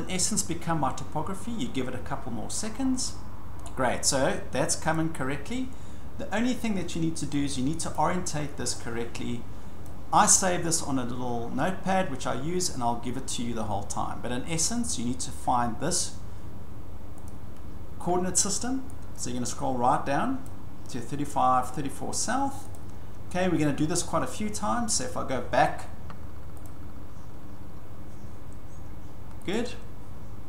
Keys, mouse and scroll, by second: 3.6 scroll, 4.9 click, 8.0 click, 9.8 click, 17.3 click, 20.4 click, 20.9 scroll, 22.7 click, 26.6 click, 29.5 click.